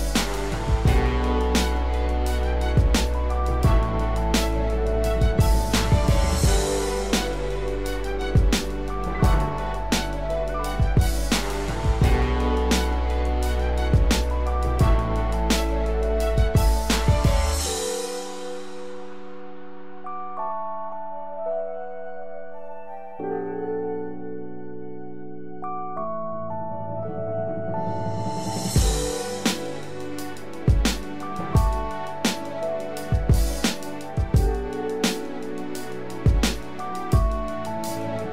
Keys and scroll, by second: 34.5 ctrl+=, 34.9 ctrl+space.